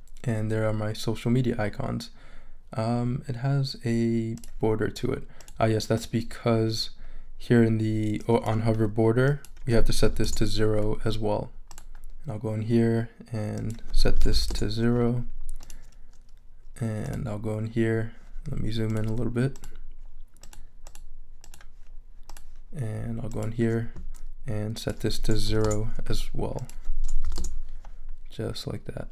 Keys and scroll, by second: 10.0 0, 10.3 Return, 14.2 super+a, 14.3 super+0, 14.5 Return, 25.4 0, 25.6 Return, 27.2 0, 27.4 Return.